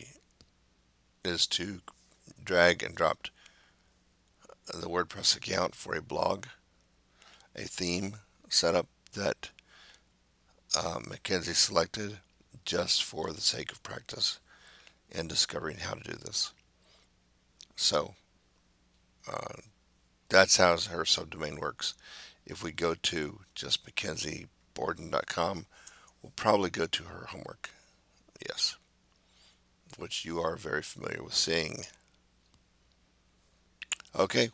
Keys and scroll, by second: 25.4 BackSpace, 25.9 Return.